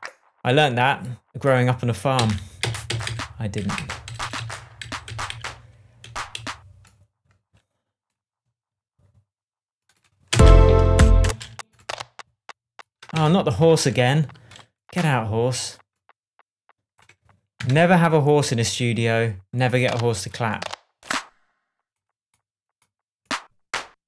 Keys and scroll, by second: 2.1 Down, 4.0 Up, 4.8 Down, 6.0 Up, 10.3 space, 13.1 BackSpace, 13.8 shift+BackSpace, 13.9 shift+Tab, 17.7 shift+Tab.